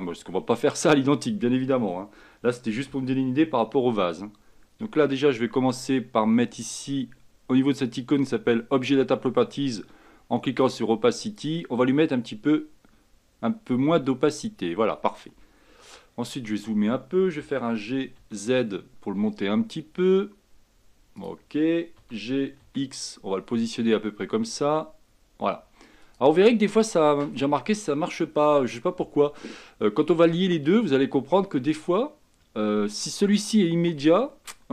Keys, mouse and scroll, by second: 3.0 g, 10.7-14.6 drag, 16.2-17.0 scroll up 6, 17.5 g, 22.1 g, 26.6-27.5 scroll down 2, 27.5 scroll down 1.